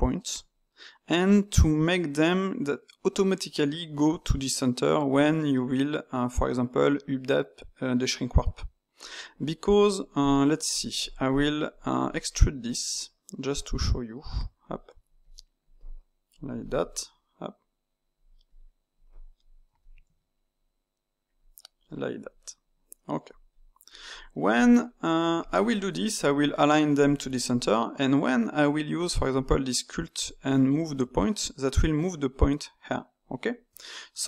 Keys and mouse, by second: 10.7 click, 11.0 shift+click, 11.2 shift+click, 12.3 middle click, 12.8 e, 14.6 click, 15.2 click, 15.8 click, 16.5 alt+click, 16.9 e, 18.4 click, 19.0 click, 19.7 alt+click, 20.0 e, 21.8 click, 22.6 click, 23.4 click, 24.0 click, 24.8 shift+middle click, 25.3 alt+click, 26.9 click, 27.6 middle click, 28.2 Tab, 30.2-33.2 drag, 33.6 Tab.